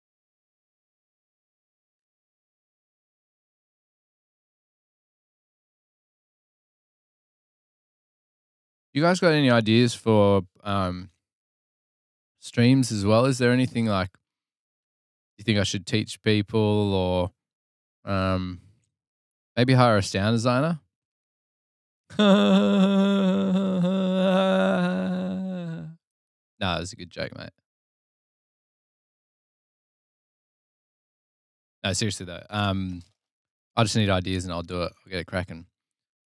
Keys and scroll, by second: 3.6 super+Tab, 6.1 super+Tab, 6.6 super+Tab, 6.8 super+Tab, 7.4 super+Tab.